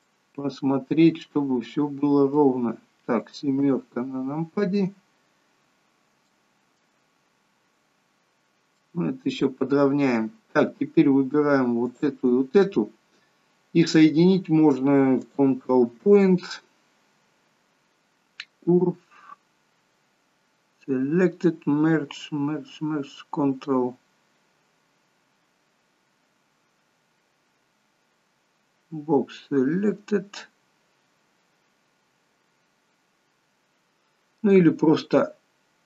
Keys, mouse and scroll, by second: 0.1 middle click, 3.6 KP_7, 6.5 shift+middle click, 8.9 middle click, 12.1 shift+click, 15.4 click.